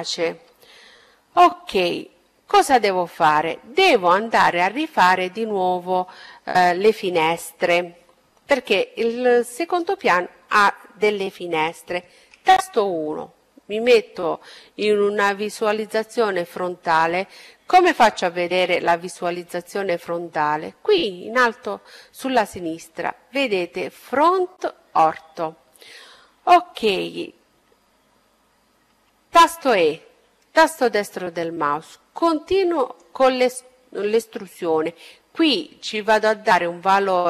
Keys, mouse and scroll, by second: 0.1-7.3 middle drag, 10.1 KP_1, 27.5 e, 29.5-31.4 drag, 33.9-35.8 drag.